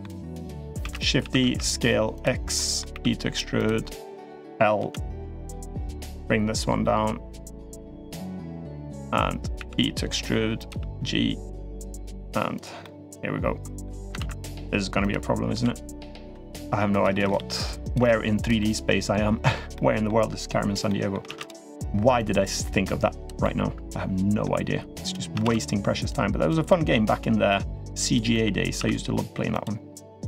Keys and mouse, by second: 0.6 shift+d, 1.0 s, 2.3 middle click, 2.7 e, 3.9 click, 4.5 l, 5.1 middle click, 5.9-8.1 drag, 8.8 click, 9.3 e, 10.4 g, 12.3 click, 12.6-13.6 middle drag, 13.9 ctrl+z, 14.8 click, 15.3-17.8 typing, 16.8 middle click, 18.4-19.3 middle drag, 19.5-19.8 middle drag, 20.6 middle drag, 21.0 shift+d, 21.9-23.0 drag, 23.2-24.2 middle drag, 24.8 click, 25.8-26.3 drag, 26.4 middle drag, 27.3 click, 28.1 middle click, 28.5 s, 29.9 click.